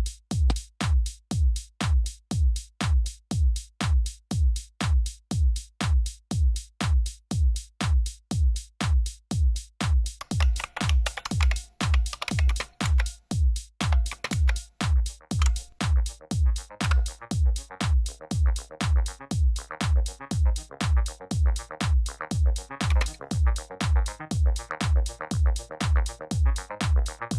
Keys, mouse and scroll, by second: 3.3-6.8 drag, 8.0 click, 9.9-14.2 typing, 15.3 typing, 16.7 Return, 22.8 space.